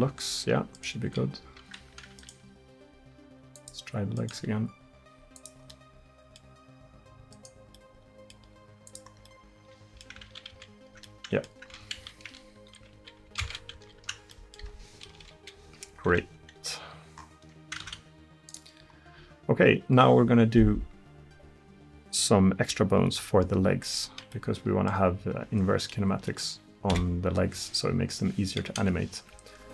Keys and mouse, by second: 1.1 r, 2.4 r, 4.5 r, 8.4 r, 10.3 ctrl+z, 10.6 ctrl+z, 12.1 ctrl+z, 12.9 ctrl+z, 13.8 ctrl+z, 15.2 KP_1, 16.1 Tab, 17.9 ctrl+s, 27.0 KP_1, 28.8 KP_3.